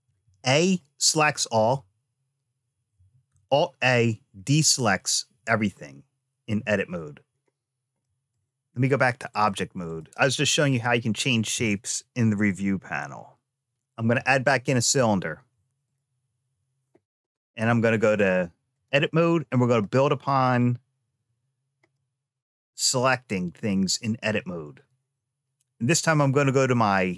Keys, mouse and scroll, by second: 0.4 click, 1.3 a, 2.9 a, 6.2 a, 8.0 ctrl+z, 8.0 middle click, 9.1 click, 10.1 BackSpace, 10.1 x, 13.7 click, 13.9 shift+a, 17.8 click, 19.6 click, 21.7-23.4 middle drag, 23.7-24.7 scroll up 2, 25.8 click.